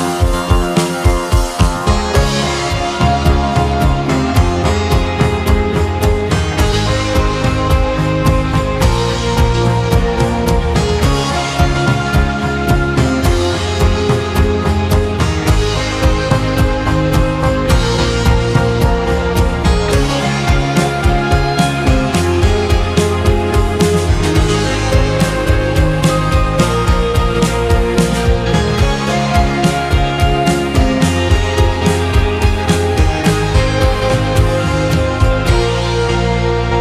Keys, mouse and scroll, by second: 3.6 click, 4.2-5.2 middle drag, 5.2-5.6 scroll down 1, 5.6-7.2 shift+middle drag, 8.2 shift+middle click, 8.6-11.0 scroll up 4, 11.1-25.2 shift+right drag, 21.0 shift+a, 28.7 r, 31.8 s, 35.2 s.